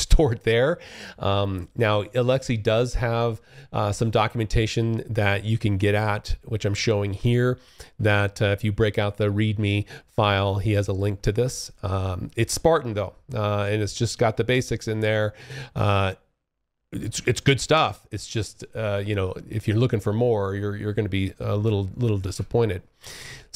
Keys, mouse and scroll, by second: 2.0 alt+Tab, 3.0 click, 21.3 alt+Tab, 23.2 click.